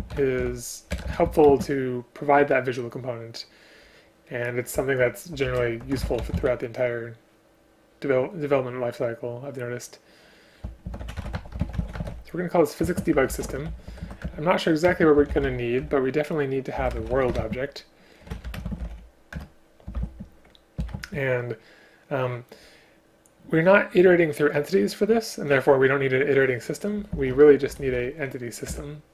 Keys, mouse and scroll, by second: 1.0 BackSpace, 1.1 BackSpace, 1.5 space, 12.8 space, 14.2 Return, 14.9 space, 15.8 Return, 17.4 space, 18.6 space, 19.4 Return, 20.0 shift+space, 20.9 shift+space, 28.7 Return.